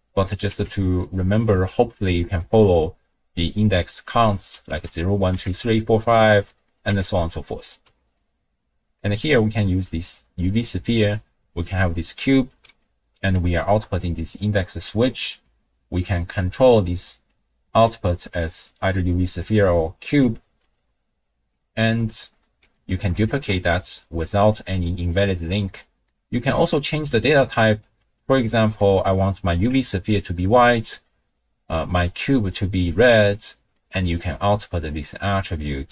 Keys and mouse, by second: 0.5 n, 2.4-5.6 drag, 6.0 click, 6.7 click, 7.6 click, 9.2-10.5 drag, 11.5-12.5 drag, 12.9-13.2 drag, 13.5 alt+shift+click, 15.3-16.3 drag, 17.1-18.2 drag, 19.0 click, 20.1-20.8 drag, 22.8 click, 23.3 ctrl+shift+d, 25.7 click, 26.5-28.2 drag, 28.6 middle click, 30.1 ctrl+click, 30.9 click, 33.7-34.2 drag, 34.9-35.9 drag.